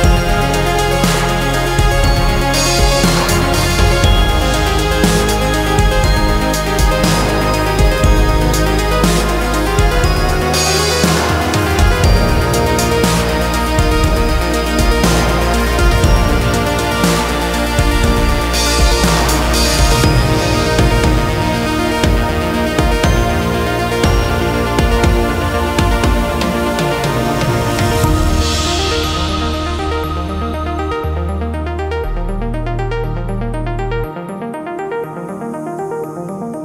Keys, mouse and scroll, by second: 1.1-2.3 drag, 5.2-6.6 drag, 7.5-7.9 scroll up 3, 7.9-8.9 middle drag, 8.9 click, 9.2-9.6 scroll down 4, 9.6-10.6 middle drag, 10.6-11.1 scroll up 1, 11.1 ctrl+s, 11.6-11.9 scroll up 1, 11.9-13.4 middle drag, 13.4 ctrl+s, 13.7 scroll up 1, 14.0-15.6 middle drag, 15.6 click, 16.1-17.1 middle drag, 17.1 ctrl+s, 18.2 alt+shift+click, 18.9 e, 24.4-26.6 drag, 27.4 alt+shift+click, 28.4-30.6 drag, 30.6 scroll down 3, 30.9-33.4 middle drag, 33.4-34.7 drag, 35.6-36.6 middle drag.